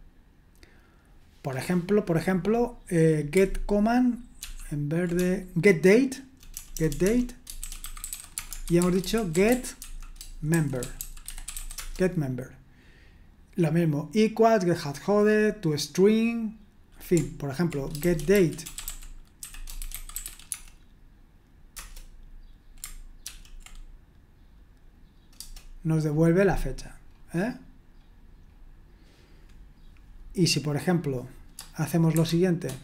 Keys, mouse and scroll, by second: 2.4 click, 4.4 ctrl+p, 5.2-12.0 typing, 17.7-20.7 typing, 21.7 Return, 23.2 ctrl+p, 25.3 Return, 27.0-30.8 scroll down 1, 30.8 click.